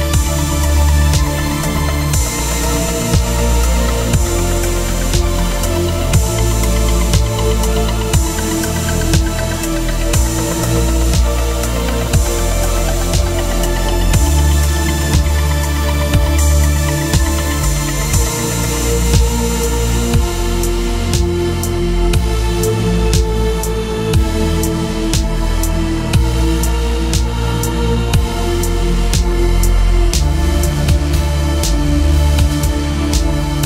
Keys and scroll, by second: 0.0-0.7 typing, 1.6 Down, 2.3 Return, 7.7 space, 10.2 space, 12.3 v, 15.3 ctrl+t, 24.6 Return, 26.8 ctrl+t.